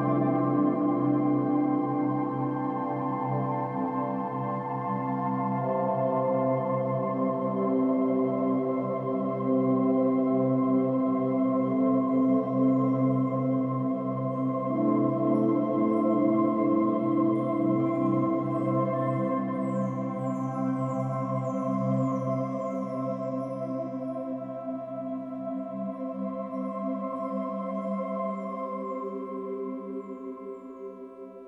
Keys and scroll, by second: 3.2 ctrl+-, 3.6 ctrl+-, 3.6 ctrl+=, 4.0 ctrl+=, 15.5 ctrl+-, 16.2 F2, 16.4 ctrl+t, 16.7 ctrl+t, 19.2 ctrl+-, 20.1 ctrl+-, 21.3 space.